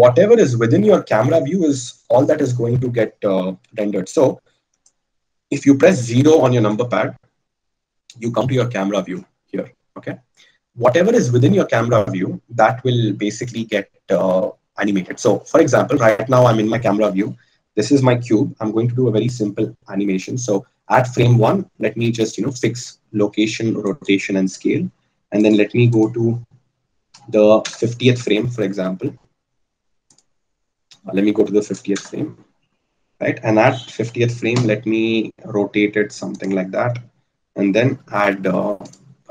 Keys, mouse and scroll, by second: 7.2 KP_0, 9.2 KP_0, 10.0 KP_0, 22.5 i, 35.0 r, 38.7 i.